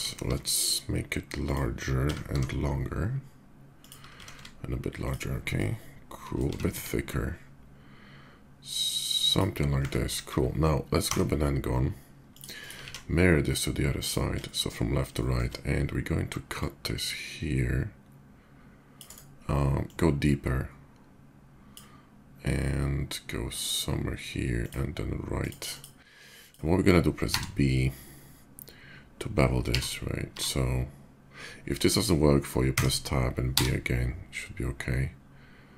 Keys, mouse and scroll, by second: 0.6 s, 1.1 click, 2.9 y, 3.5 click, 3.9 s, 4.1 x, 4.8 click, 5.1-6.1 middle drag, 6.2 s, 6.4 z, 9.0 click, 10.0 KP_5, 10.7 d, 11.9 click, 12.2 click, 12.8 alt+x, 13.8 click, 14.2 shift+middle click, 14.9 shift+middle click, 16.3-18.7 shift+drag, 18.8 right click, 19.6-21.5 drag, 24.4 click, 25.2 drag, 25.5 click, 26.2 click, 27.7 b, 32.5 Tab, 33.3 b.